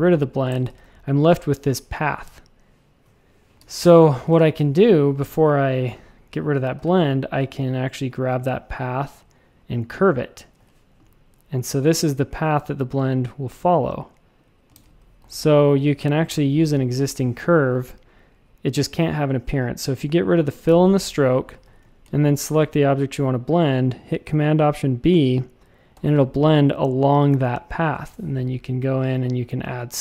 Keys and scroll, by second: 0.5 shift+super+a, 3.6 super+z, 4.3 shift+super+a, 6.7 shift+c, 10.5 a, 14.7 shift+super+a, 15.2 v, 16.2 BackSpace, 16.5 a, 17.7 x, 20.6 /, 21.6 a, 25.9 alt+super+b, 27.9 w, 28.0 Return.